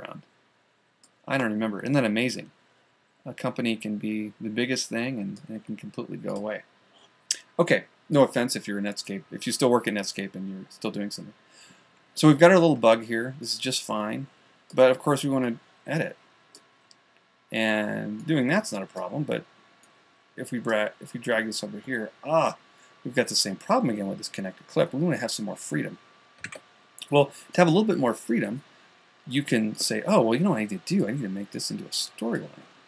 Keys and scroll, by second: 15.7 a, 27.0 super+z.